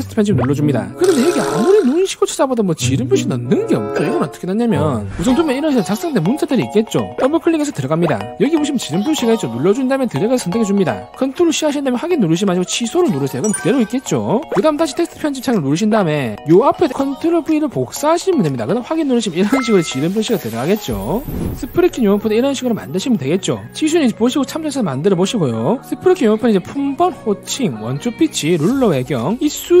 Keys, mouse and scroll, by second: 0.0 click, 1.3 click, 1.4 click, 7.2 click, 7.3 click, 7.5 click, 9.9 click, 13.0 click, 15.5 click, 17.6 ctrl+v, 19.1 click.